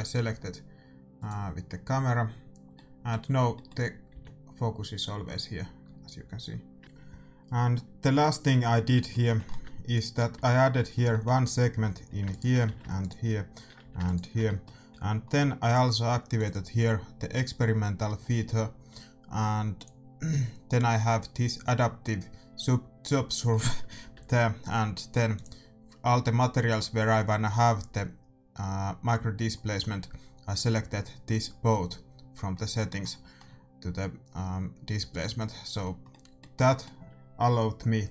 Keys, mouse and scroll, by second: 0.8 middle click, 1.7-3.1 right drag, 2.9-4.1 middle drag, 4.1 g, 7.7-9.9 middle drag, 9.9 right click, 10.3 Tab, 11.2 right click, 11.7 a, 12.3-15.9 right drag, 12.6 a, 13.8 a, 14.4-19.7 middle drag, 14.9 a, 16.3-18.2 drag, 19.7-21.5 drag, 23.5 middle click, 24.1 Tab, 24.2 middle click, 25.3-27.0 drag, 27.2-33.2 middle drag, 36.1-38.1 middle drag.